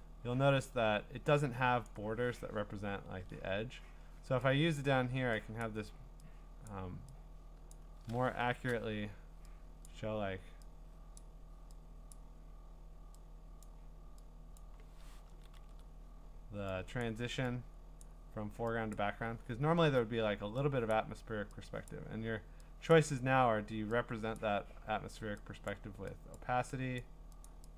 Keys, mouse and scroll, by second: 1.8 click, 3.1 ctrl+z, 4.8 click, 5.6 click, 6.7 click, 7.7 click, 8.5 %, 11.2 click, 12.1 click, 13.6 click, 14.6 click, 15.3 ctrl+z, 15.5 ctrl+z, 17.0 click, 18.0 click, 18.9 click, 19.4 scroll, 20.9 middle click, 20.9 click, 21.9 click, 22.9 click, 24.4 click, 26.3 click, 27.0 click, 27.4 click.